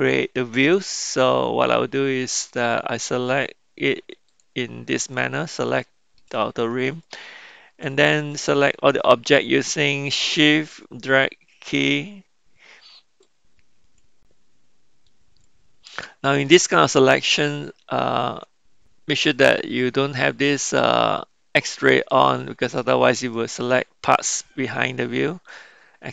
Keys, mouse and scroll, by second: 4.2 click, 5.1-5.5 middle drag, 5.8-6.1 shift+middle drag, 7.0 middle click, 8.2-11.2 shift+drag, 13.3-14.1 shift+drag, 15.1-15.5 shift+drag, 16.8-18.3 middle drag, 21.7 click, 23.4-26.1 middle drag.